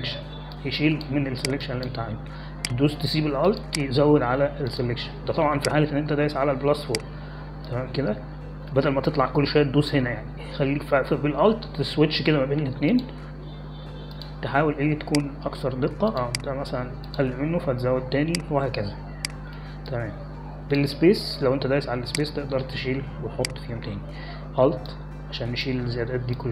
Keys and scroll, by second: 21.7 space.